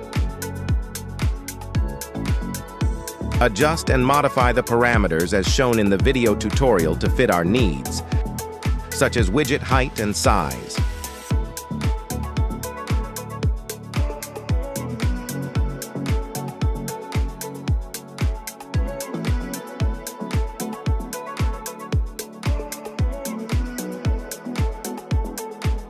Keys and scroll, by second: 6.3 Return, 15.8 KP_0, 16.4 Return.